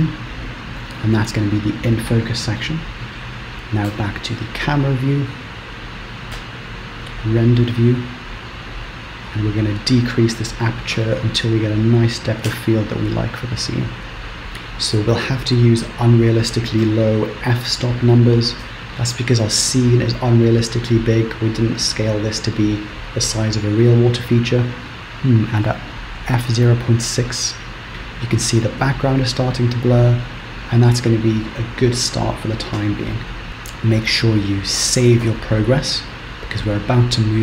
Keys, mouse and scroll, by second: 4.1 KP_0, 4.8 scroll up 1, 6.6 z, 8.3-9.4 scroll down 5, 9.4 click, 15.8 click, 33.1 z, 36.7 ctrl+s.